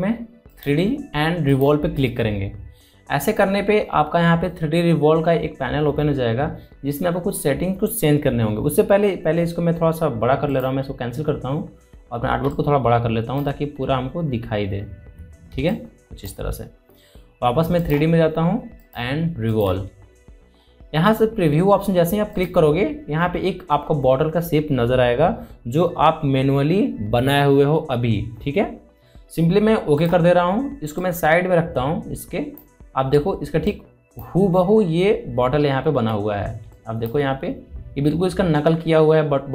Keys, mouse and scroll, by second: 0.2 scroll down 2, 1.8 click, 12.8 click, 13.9 alt+scroll up 1, 14.7 space, 14.8 click, 15.3 space, 17.1 alt+scroll down 1, 17.8 space, 17.9 click, 18.4 space, 20.1 click, 24.6 click, 32.3-38.1 drag, 38.1 alt+scroll up 1, 38.9 space, 39.0 click, 39.4 space.